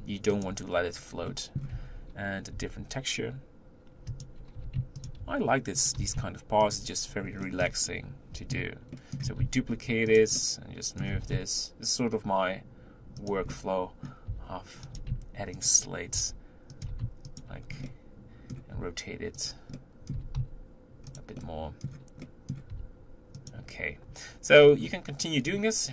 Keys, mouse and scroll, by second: 0.9 scroll down 2, 1.3 middle click, 1.8 Tab, 2.6 g, 4.6 g, 5.2 r, 6.1 g, 7.4 shift+middle click, 8.0-8.4 scroll up 2, 8.4 Tab, 9.0 middle click, 9.4 shift+d, 10.4-11.1 middle drag, 11.1 g, 13.5 middle click, 14.4 r, 15.3 g, 16.8 g, 17.6 scroll down 1, 17.9 middle click, 18.8 r, 19.9 middle click, 20.2 r, 21.4-22.8 middle drag, 22.8 r, 24.7-25.4 scroll down 4, 25.4-25.9 scroll down 1.